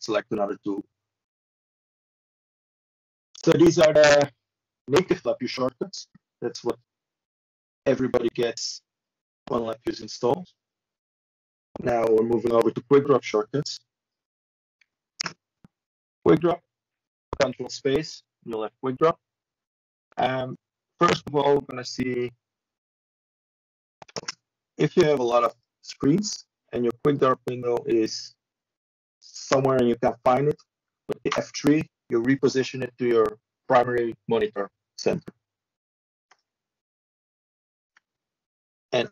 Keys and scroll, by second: 15.8 Tab, 16.8 shift+Tab, 18.2 Tab, 21.2 ctrl+Delete, 24.6 ctrl+Return, 27.6 b, 34.8 ctrl+shift+Delete, 36.8 Down, 38.2 Escape.